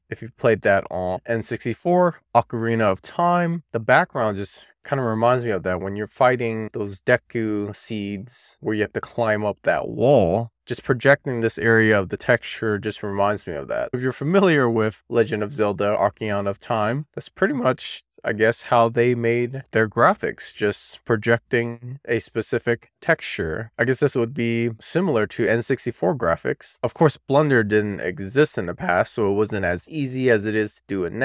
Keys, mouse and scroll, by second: 1.0-2.3 scroll up 1, 3.6 click, 8.2 click, 9.0-10.0 scroll down 2, 10.0-10.4 scroll up 1, 10.4 click, 11.3 click, 18.7-19.2 scroll down 1, 19.2 middle click, 19.9-20.7 scroll up 2, 20.7-21.7 middle drag, 22.2-23.0 scroll down 1, 23.0-24.4 middle drag, 24.9 scroll down 1, 25.0 middle click, 26.6-27.8 scroll down 4, 27.8-29.8 scroll up 2, 30.1 click.